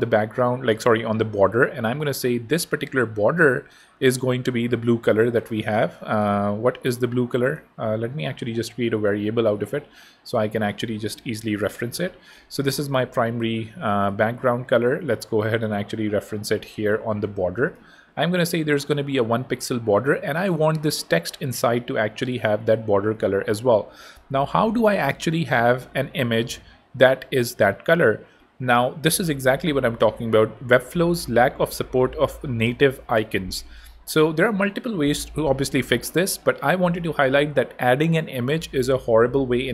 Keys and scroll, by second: 11.1-12.2 typing.